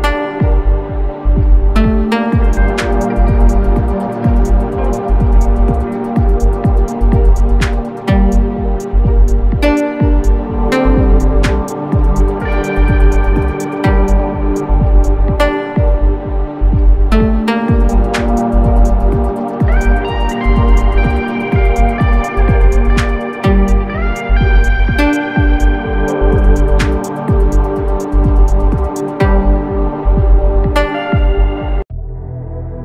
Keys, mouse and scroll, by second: 0.4 space, 0.6 click, 0.8 space, 3.6 click, 8.5 click, 16.0-18.1 typing, 18.6 Return, 19.6 click, 20.6 ctrl+space, 20.8 ctrl+click, 21.1 ctrl+space, 21.8 scroll down 1, 24.6 shift+Down, 27.6 shift+Up, 28.4 ctrl+space, 28.6 ctrl+click, 28.8 ctrl+space, 30.4 Down, 31.4 Up.